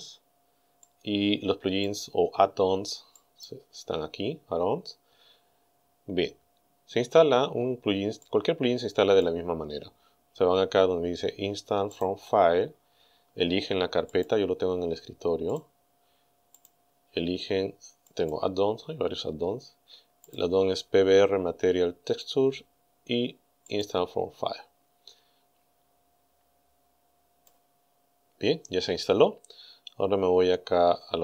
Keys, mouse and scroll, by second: 0.9-2.1 drag, 3.2 click, 8.2-9.4 drag, 11.9 click, 14.2 click, 15.5 click, 16.6 click, 18.1 click, 20.3 click, 23.7 click, 27.4 click, 30.1-30.5 scroll down 2.